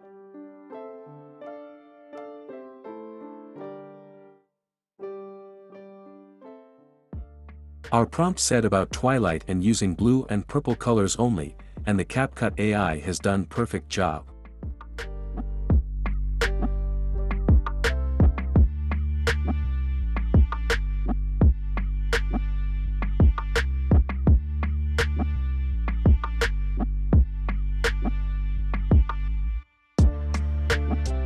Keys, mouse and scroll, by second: 2.0-3.0 drag, 3.2 click, 5.0 click, 6.5-8.1 drag, 14.7 click, 14.9 click, 15.4 drag, 21.3 click, 24.1-25.1 drag, 26.8 click, 30.5 click.